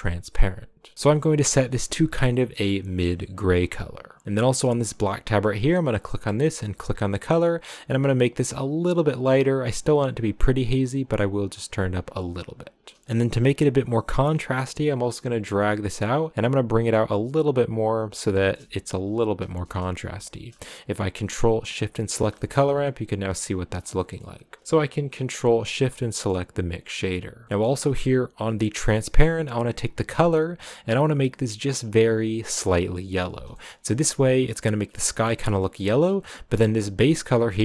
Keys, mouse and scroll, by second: 0.9 click, 4.8 click, 5.5 click, 6.1-7.2 middle drag, 7.2 click, 13.0 scroll up 5, 13.8-18.3 drag, 18.3-21.7 shift+middle drag, 21.7 ctrl+shift+click, 22.3-25.5 shift+middle drag, 25.5 ctrl+shift+click, 25.9-26.3 scroll down 2, 26.3-29.8 middle drag, 29.8 click, 30.9 click, 33.5 shift+middle click, 33.6 scroll up 1, 35.3 scroll down 2, 35.7 middle click, 36.0 scroll up 3, 37.0 click.